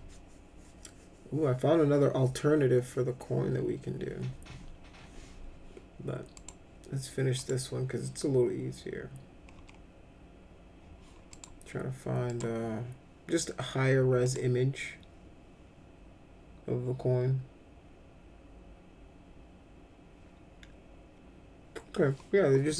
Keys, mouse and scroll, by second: 6.3 click, 7.3 click, 11.3 click, 12.3 click, 14.2 click.